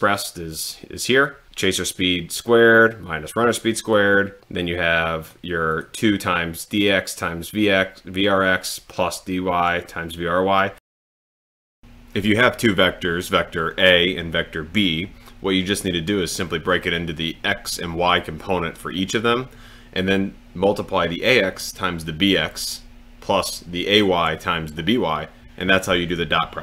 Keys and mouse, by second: 1.3 click, 3.1 click, 4.4 click, 5.7 click, 11.8 super+l.